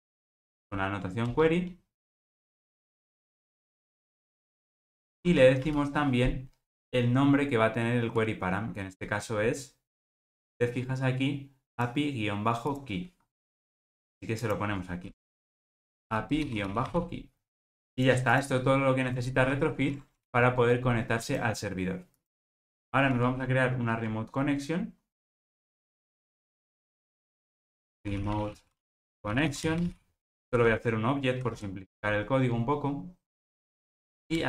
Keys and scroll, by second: 1.3 alt+Return, 19.7 alt+super+l.